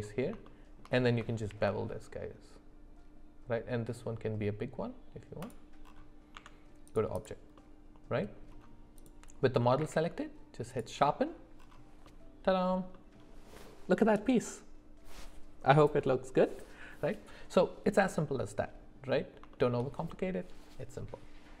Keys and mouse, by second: 0.5 shift+middle click, 1.5 ctrl+b, 6.3 Tab, 7.6 middle click, 9.0 click, 9.8 q, 12.1 middle click, 12.9 middle click, 18.1 middle click, 19.5 shift+middle click.